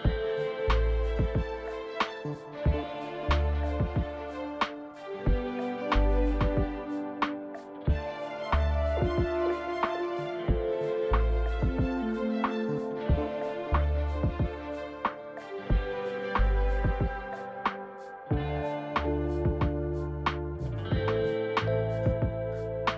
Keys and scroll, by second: 5.2-6.0 typing, 13.0-13.8 typing.